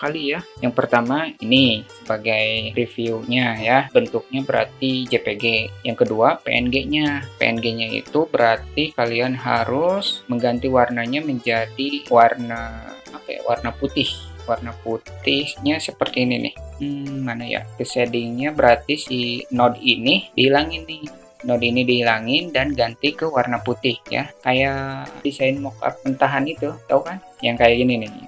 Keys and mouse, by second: 9.8-11.6 drag.